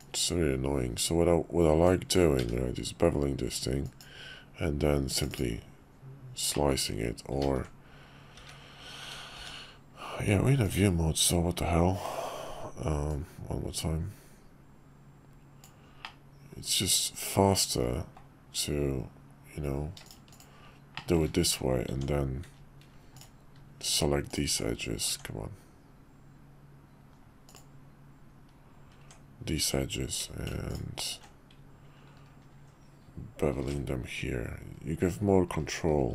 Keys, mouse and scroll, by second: 0.0-4.5 drag, 6.5 click, 7.5 ctrl+z, 8.4 `, 9.3 shift+v, 13.1-20.5 drag, 21.0 shift+middle drag, 21.9 Tab, 23.1 ctrl+alt+click, 24.3 ctrl+alt+click, 25.1 Tab, 27.4 click, 29.0 Tab, 30.7 ctrl+alt+click, 33.6 ctrl+b.